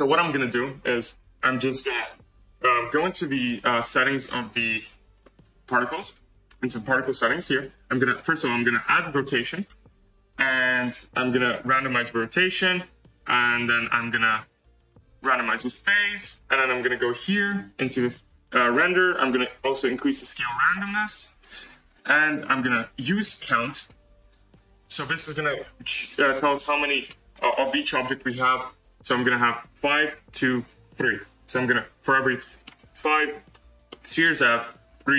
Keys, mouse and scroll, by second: 0.4-1.3 scroll down 3, 1.5 scroll down 1, 2.3 click, 3.8 click, 8.9-25.2 drag, 25.2 scroll up 2, 25.4-26.3 middle drag, 26.3-26.7 scroll up 1, 27.0-29.9 middle drag, 29.9-32.6 drag, 32.6-35.1 middle drag.